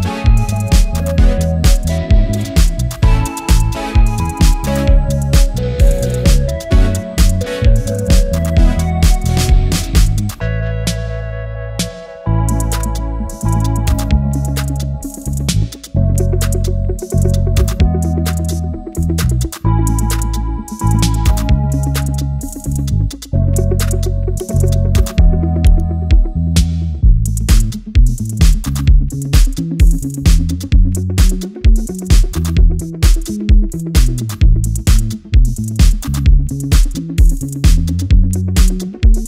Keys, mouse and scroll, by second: 2.4-3.4 alt+scroll down 1, 3.4 click, 3.5 typing, 4.6 typing, 8.0 click, 11.3 Return, 12.5 ctrl+t, 14.0-15.4 drag, 15.4 alt+scroll down 1, 16.6 click, 17.9 space, 18.2 click, 18.5 space, 19.4-27.2 drag, 19.5-20.2 typing, 23.4 typing, 24.5 typing, 26.6-28.1 typing, 27.9 click, 28.4-28.7 alt+scroll up 1, 31.2-31.9 alt+scroll up 1, 31.9-36.8 drag, 36.8 typing.